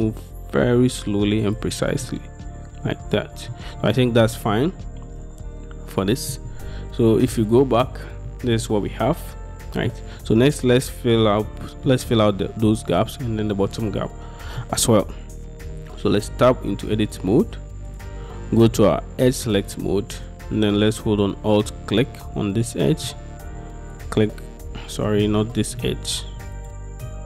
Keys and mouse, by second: 1.5 shift+middle click, 2.1-3.6 middle drag, 4.2 middle click, 7.5 middle click, 8.0 Tab, 8.4-10.0 middle drag, 11.3-12.0 middle drag, 12.8-13.1 middle drag, 14.7-16.3 middle drag, 16.4 Tab, 16.8-18.0 middle drag, 18.0 click, 19.3 click, 19.7-21.3 middle drag, 22.7 middle click, 24.0 alt+shift+click, 25.7 ctrl+z, 26.6 alt+shift+click.